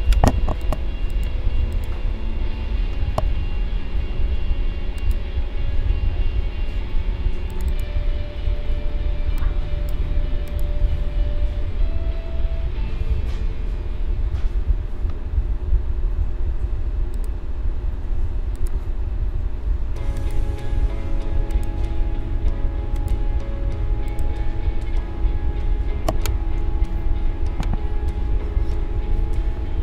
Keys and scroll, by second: 26.6 ctrl+z.